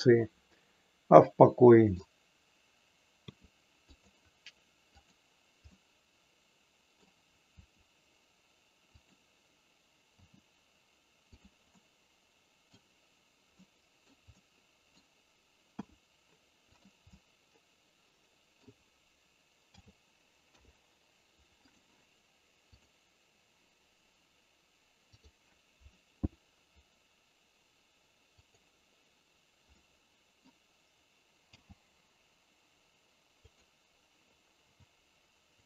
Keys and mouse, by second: 3.3 r, 5.7-7.0 middle drag, 7.7 r, 10.2 g, 11.7-12.7 middle drag, 13.5 middle click, 14.3 middle click, 15.7 r, 17.2-18.7 middle drag, 19.7 a, 20.5 i, 22.9 click, 28.4 click, 29.8 middle click, 31.5 g, 34.8 r.